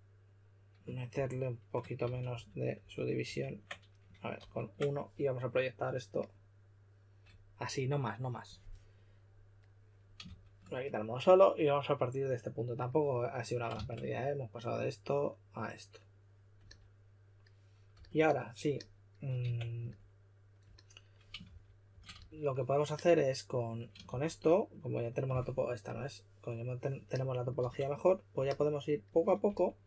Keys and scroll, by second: 1.0 shift+d, 2.0 super+z, 2.2 super+z, 2.7 super+z, 4.3 super+d, 10.2 shift+s, 13.7 shift+s, 17.9 s, 19.4 Tab, 21.1-22.6 typing, 24.0 shift+f, 27.5 shift+f, 29.4 s.